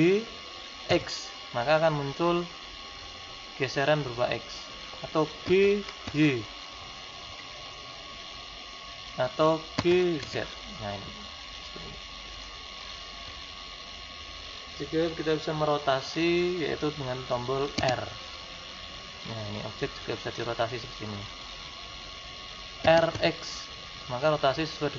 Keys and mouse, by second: 9.8 g, 17.9 r.